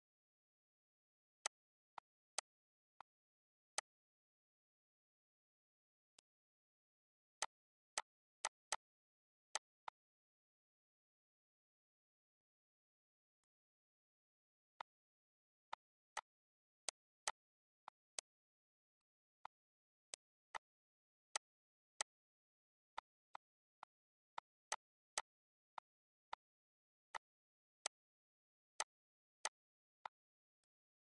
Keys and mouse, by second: 0.6 shift+click, 2.6 shift+click, 5.1 click, 6.4 click, 8.6 click, 9.7 ctrl+z, 11.7 click, 12.7 click, 14.1 click, 15.1 click, 16.2 click, 17.2 click, 18.3 click, 19.4 click, 20.6 click, 21.2 click, 22.2 click, 23.5 click, 24.9 click, 26.2 click, 26.9 click, 27.9 click, 28.5 click, 29.2 click, 29.8 click, 30.3 click.